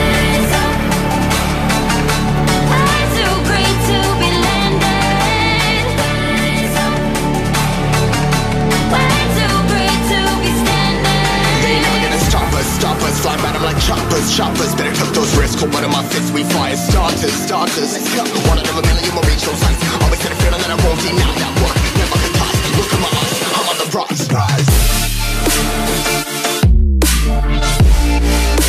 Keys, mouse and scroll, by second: 0.0-0.9 typing, 0.0 Return, 0.1 KP_Add, 1.2 click, 2.5 click, 2.9 c, 2.9 alt+Tab, 3.2 ctrl+v, 3.6 click, 6.5 ctrl+0, 7.0-7.4 scroll up 1, 7.4 click, 7.5-7.9 scroll up 1, 7.9 click, 8.0 right click, 8.3 click, 8.6-9.2 scroll up 1, 9.2 click, 9.7-10.1 scroll up 1, 10.1 click, 12.1 ctrl+s, 14.1 click, 17.1 1, 17.8 click, 22.6 ctrl+s, 23.9 click, 26.1 2, 26.9 click.